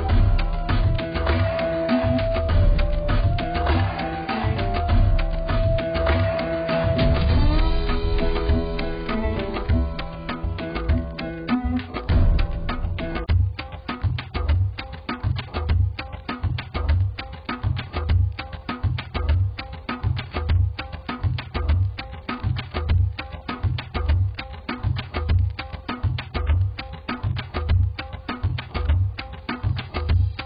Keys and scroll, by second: 3.3 [, 3.7 [, 16.5-18.1 typing, 18.6 Return, 25.5 [, 25.7 [, 25.9 [, 26.1 [, 27.7-28.6 typing.